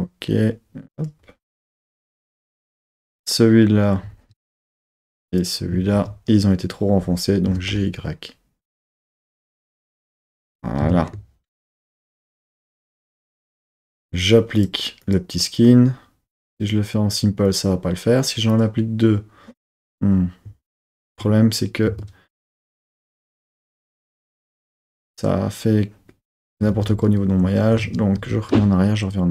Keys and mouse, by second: 0.9 click, 2.4 Tab, 3.1 click, 4.0 z, 5.1 shift+click, 5.9 z, 7.4 g, 7.6 y, 10.4 click, 10.8 Tab, 12.0 Tab, 14.5 Tab, 14.5-15.1 drag, 16.4 click, 17.4 click, 18.4 click, 21.9 Tab, 22.9 1, 23.7 z, 24.4 z, 26.6 super+z, 27.0 super+z, 27.7 super+z, 28.1 super+z.